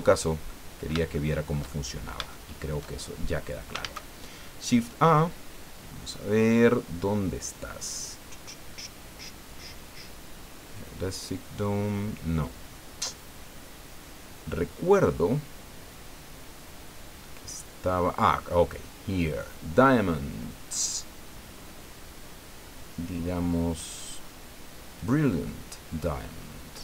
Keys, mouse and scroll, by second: 0.5 middle click, 2.3 shift+middle click, 3.0 shift+scroll up 1, 3.8 shift+a, 25.0 click, 25.8 scroll down 2, 26.0-26.8 drag.